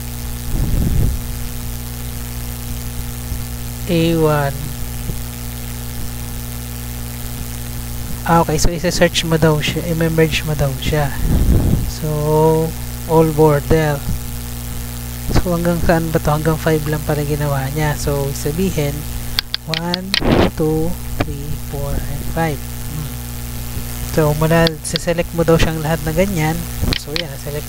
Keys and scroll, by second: 18.4 Tab, 20.3 2, 20.8 Down, 21.0 3, 21.3 Down, 21.5 4, 21.8 Down, 22.1 5, 22.6 Down, 22.9 Up.